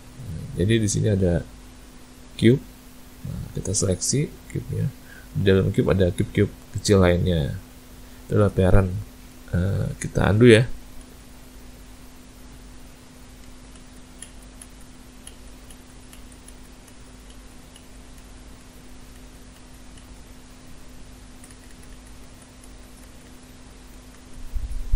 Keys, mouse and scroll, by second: 2.3 click, 4.7 click, 6.1 click, 7.8 click, 9.3 shift+middle click, 10.6 ctrl+z, 11.1 ctrl+z, 12.2 click, 12.9 click, 13.5 ctrl+z, 13.8 ctrl+z, 14.3 ctrl+z, 14.7 ctrl+z, 15.3 ctrl+z, 15.8 ctrl+z, 16.2 ctrl+z, 16.5 ctrl+z, 16.9 ctrl+z, 17.4 ctrl+z, 17.8 ctrl+z, 18.2 ctrl+z, 18.7 ctrl+z, 19.2 ctrl+z, 19.6 ctrl+z, 20.0 ctrl+z, 20.8 click, 21.3 ctrl+z, 21.6 ctrl+z, 21.8 ctrl+z, 22.0 ctrl+z, 22.3 ctrl+z, 22.7 ctrl+z, 23.1 ctrl+z, 23.3 ctrl+z, 23.8 ctrl+z, 24.2 ctrl+z, 24.8 click.